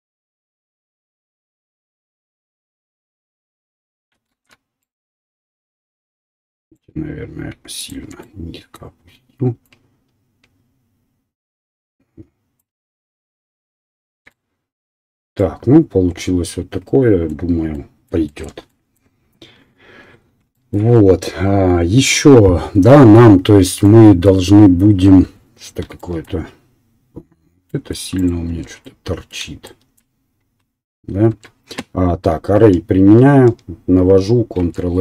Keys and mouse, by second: 0.7 click, 0.8-2.8 middle drag, 2.8-5.1 drag, 4.3 ctrl+z, 4.8 right click, 6.6 click, 7.8-10.1 alt+drag, 7.8 alt+middle click, 7.8 alt+right click, 12.5-13.5 drag, 13.5-16.3 right drag, 14.1 Tab, 16.3-17.5 middle drag, 17.5 right click, 27.4-29.8 middle drag, 28.2 click, 28.2 right click, 28.4 Tab, 31.4 Tab, 34.0-35.0 ctrl+drag, 34.6 ctrl+a.